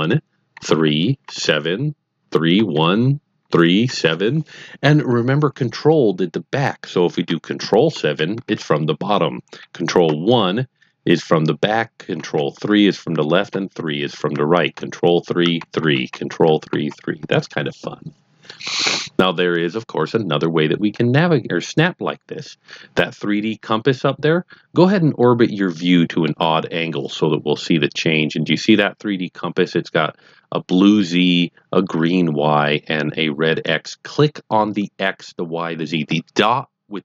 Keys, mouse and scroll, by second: 0.0-3.8 typing, 7.9 ctrl+KP_7, 10.0 ctrl+KP_1, 12.1 ctrl+KP_3, 14.7 ctrl+KP_3, 15.4 KP_3, 16.1 ctrl+KP_3, 25.2 middle click.